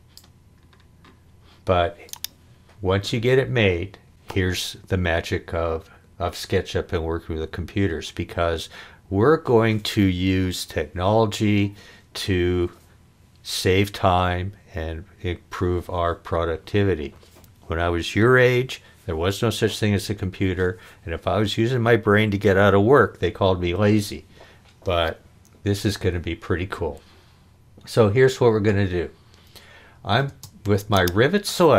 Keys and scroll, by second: 30.3 space.